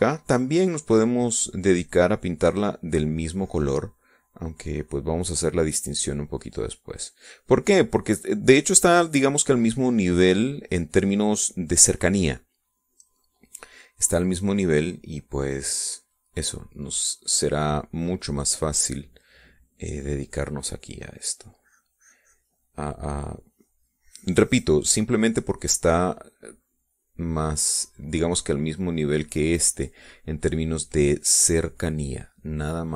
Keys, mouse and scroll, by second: 3.7-12.3 drag, 14.0-16.8 drag, 16.9-21.0 drag, 21.8-28.4 drag, 28.5-30.6 drag.